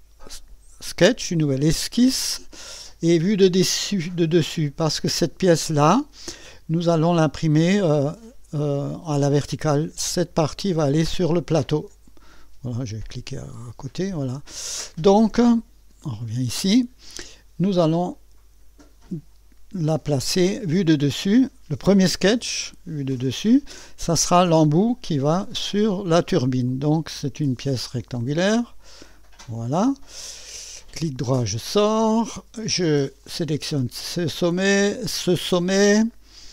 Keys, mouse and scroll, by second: 1.4 click, 6.0 click, 11.0 click, 11.3 click, 13.6 click, 16.3 click, 18.1 click, 22.0 click, 26.7 click, 28.5 click, 29.5 click, 30.6 right click, 33.2 click, 35.2 click.